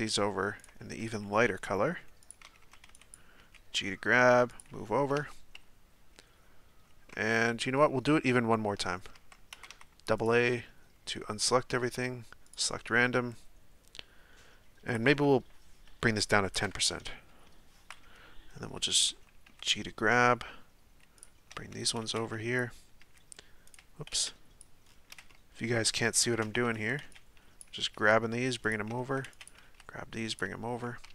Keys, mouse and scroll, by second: 1.0 g, 2.4 a, 2.6 a, 3.1 b, 3.4 g, 5.2 Tab, 7.1 Tab, 8.8 Tab, 9.2 Tab, 9.6 a, 9.7 a, 12.5-19.1 drag, 19.1 a, 19.5 g, 21.5 a, 21.7 a, 22.6 b, 23.0 g, 24.6 b, 26.6-29.6 typing, 31.0 Tab.